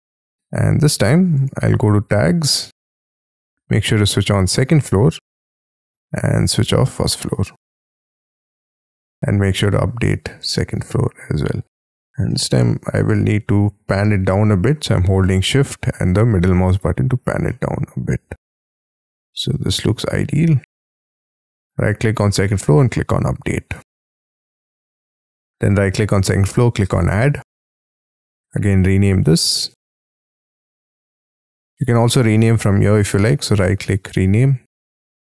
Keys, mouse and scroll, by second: 12.2 shift+middle click, 17.4 shift+middle click, 21.6 right click, 24.8 right click, 25.6 right click, 32.9 right click, 34.7-35.2 typing.